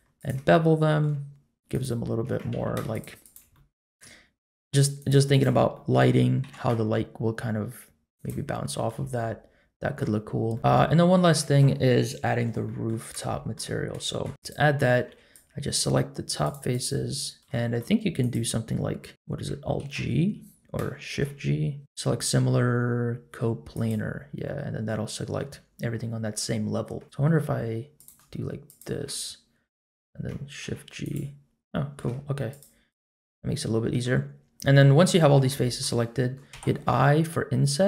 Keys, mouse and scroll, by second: 0.1 shift+click, 0.5 middle click, 1.7 shift+click, 2.5 ctrl+z, 2.9 shift+click, 3.5 middle click, 5.0 shift+click, 5.3 shift+click, 5.7 middle click, 6.4 ctrl+b, 8.5 middle click, 8.9 Tab, 9.1-10.0 middle drag, 10.3 scroll up 1, 10.5-11.2 middle drag, 10.6-11.2 scroll down 1, 12.6 middle click, 13.3 shift+middle drag, 13.8 scroll up 1, 14.1 shift+middle click, 14.3 Tab, 14.4 click, 15.0 3, 15.3 click, 16.7 shift+click, 17.2 shift+click, 17.6 middle click, 18.2 click, 19.8 alt+g, 21.1 shift+g, 24.4 middle click, 27.0 shift+click, 27.9 shift+click, 28.6 shift+click, 30.6 shift+g, 31.7 middle click, 32.5 shift+click, 32.9 shift+click, 33.3 middle click, 34.4-34.7 scroll up 1, 34.7 middle click, 35.1 shift+middle click, 35.5 middle click, 36.5 i.